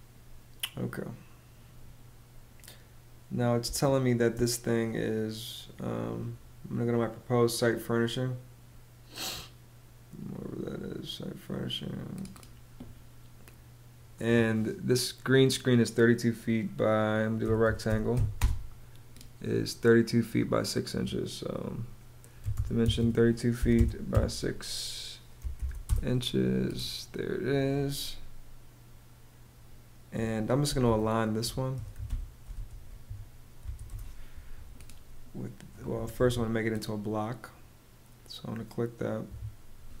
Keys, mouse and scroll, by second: 3.1 space, 16.7-18.1 typing, 21.7-23.6 typing, 25.1 ', 25.3 Return, 30.0-33.1 typing, 33.4 Return, 34.3 Return, 35.5 Escape, 38.8 Escape, 39.5-40.0 typing.